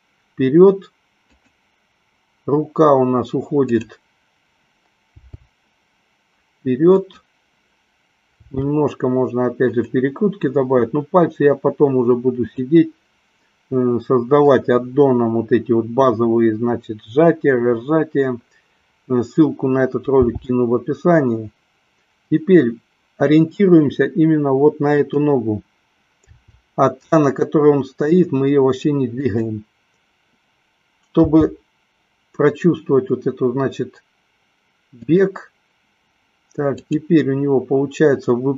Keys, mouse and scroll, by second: 1.8 click, 3.7 click, 5.6 g, 7.2 click, 8.7 r, 10.1 click, 20.4 g, 25.4 click, 26.6 r, 29.4 click, 31.4 g.